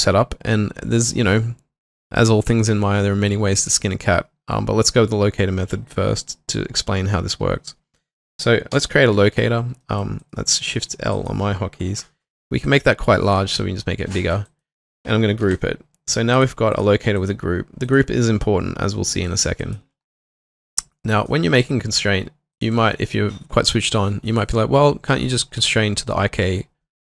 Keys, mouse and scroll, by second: 8.7 l, 10.2 alt+right click, 10.7 alt+middle click, 13.6 middle click, 14.4 alt+right click, 14.7 alt+middle click, 15.4 ctrl+g, 16.8 double click, 19.3 alt+middle click, 19.6 alt+right click, 22.0 q, 22.6 ctrl+click.